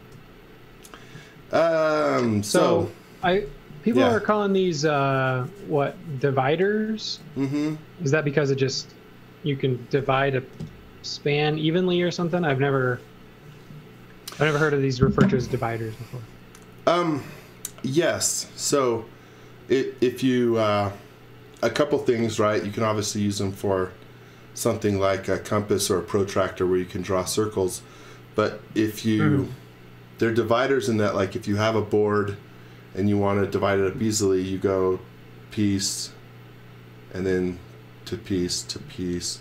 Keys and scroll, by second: 1.2 z.